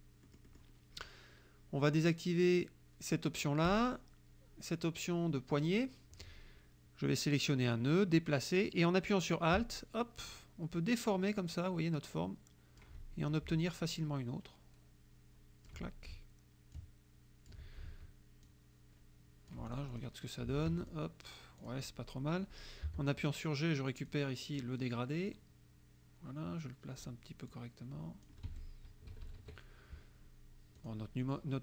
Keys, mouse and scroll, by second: 0.3 click, 3.7 click, 5.6 click, 7.7-13.0 drag, 13.9-15.9 alt+drag, 16.8 alt+click, 18.5-20.3 alt+drag, 20.8 F1, 20.9 click, 21.7 click, 22.9 g, 24.1 click, 25.3-27.2 drag, 27.5 click, 28.5 F1, 29.1 KP_Subtract, 30.8 click.